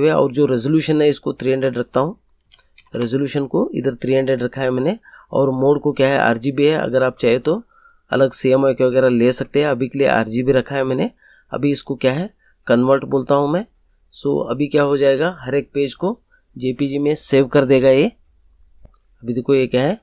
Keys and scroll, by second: 2.3 3, 2.7 0.